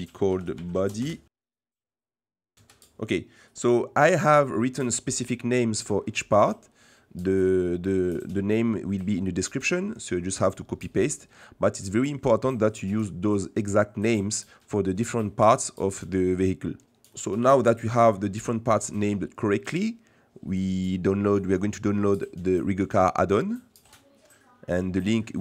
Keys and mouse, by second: 1.6 middle click, 1.9 middle click, 2.5 ctrl+v, 2.5 Escape, 2.5 F2, 5.2 middle click, 8.9 middle click, 14.7 middle click, 17.1 middle click, 22.5 middle click.